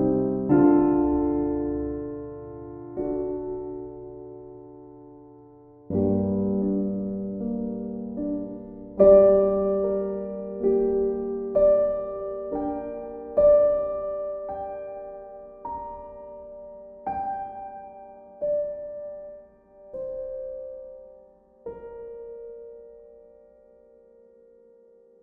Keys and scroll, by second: 23.0 Delete, 24.0 ctrl+d.